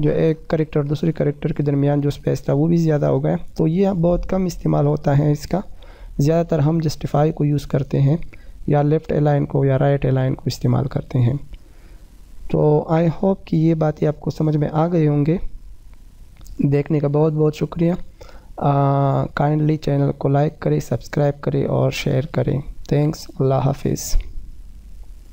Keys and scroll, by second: 2.1 F3, 3.0 F3, 5.4 ctrl+j, 13.1 F4.